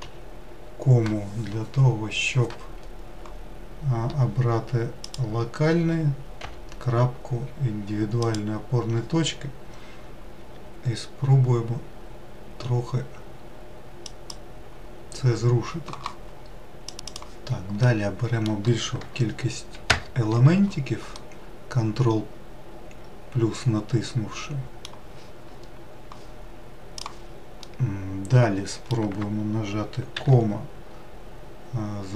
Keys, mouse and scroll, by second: 0.1 ,, 6.5 ., 10.4 r, 17.7-19.8 middle drag, 19.8 ctrl+KP_Add, 21.0-24.2 middle drag, 27.6-30.1 middle drag, 30.1 ,.